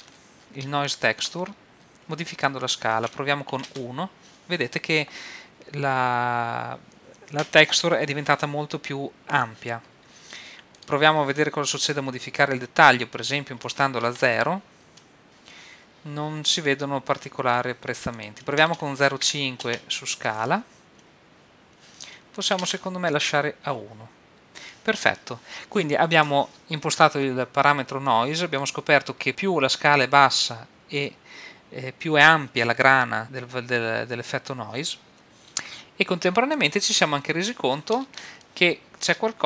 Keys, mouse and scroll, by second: 2.6-4.5 drag, 10.7-12.6 drag, 18.1-20.4 drag, 22.3-24.5 drag, 28.1-29.3 drag, 36.5 middle click.